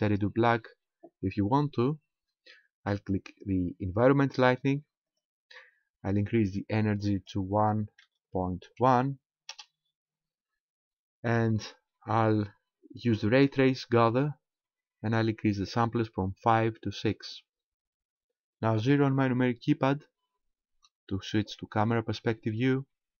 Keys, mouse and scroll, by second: 5.1 click, 7.2 click, 11.7-12.6 scroll down 1, 12.6 scroll down 2, 17.0 click, 20.7 KP_0.